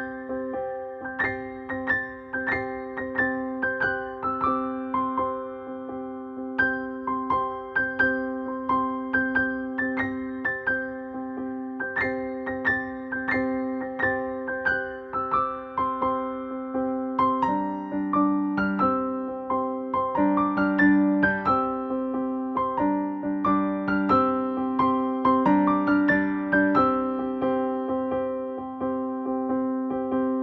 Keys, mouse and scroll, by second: 2.4 1, 4.8 typing, 8.0 shift+Return, 10.3 s, 13.1 space, 13.5 n, 16.9 click, 21.2 click, 23.5 click, 28.8-30.2 drag.